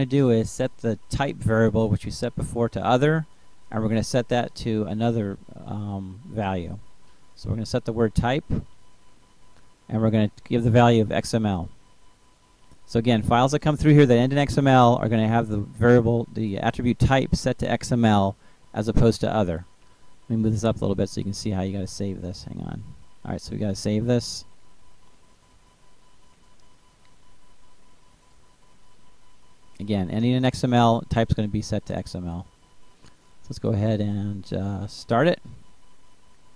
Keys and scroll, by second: 5.5-7.0 typing, 8.5-9.6 typing.